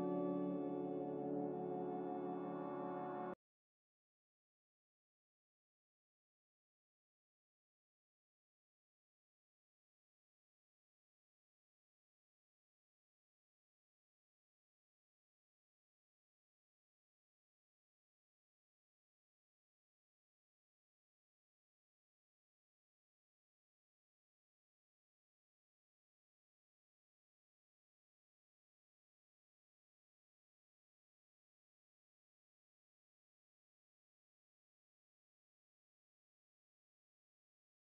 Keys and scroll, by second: 35.3 q.